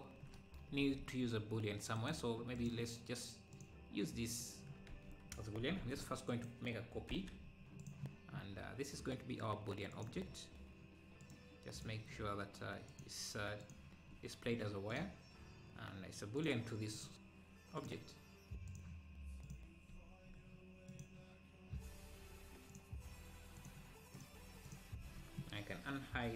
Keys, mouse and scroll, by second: 0.9 ctrl+s, 2.0-3.6 right drag, 3.6-5.0 drag, 5.0 ctrl+s, 5.3-5.7 scroll down 5, 5.9 shift+d, 7.2 h, 7.5-7.8 scroll up 4, 7.8 click, 8.3-8.7 scroll down 7, 9.9 click, 10.4-10.7 scroll down 4, 11.2 click, 12.1-12.6 scroll down 2, 12.9-14.1 drag, 14.9-20.0 drag, 20.9-25.0 drag.